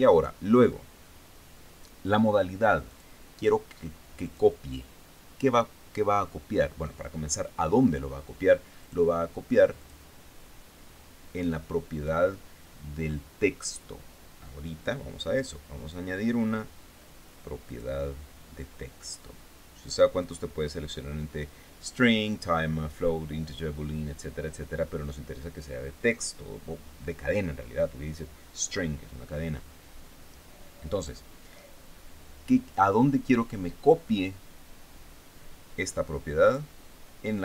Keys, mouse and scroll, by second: 0.1 click, 3.3 click, 4.7 click, 9.3 click, 10.2 click, 18.1 click, 20.7 click, 36.9 click.